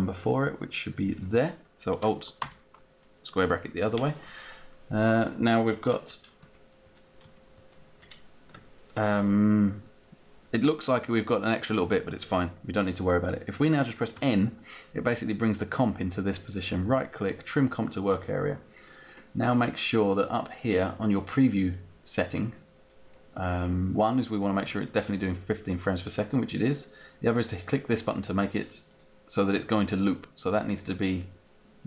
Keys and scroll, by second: 2.1 alt+], 5.5 ctrl+Right, 6.3 ctrl+Left, 7.1 ctrl+Right, 7.9 ctrl+Left, 8.7 ctrl+Left, 14.3 n.